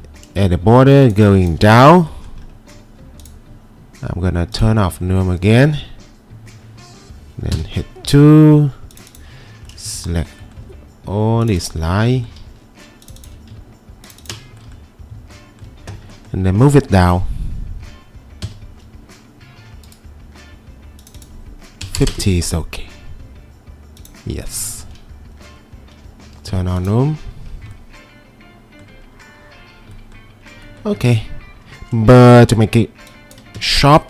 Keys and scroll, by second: 1.7 Escape, 7.5 2, 18.5 w, 21.6-22.5 typing, 24.6 typing, 26.5 2, 32.3 ctrl+2, 33.5 Escape.